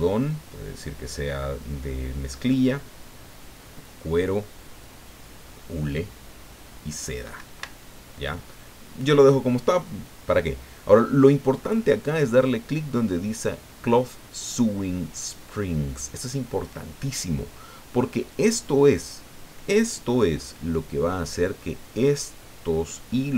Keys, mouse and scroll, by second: 7.7 Escape, 10.3-12.0 scroll down 8, 20.4 middle click.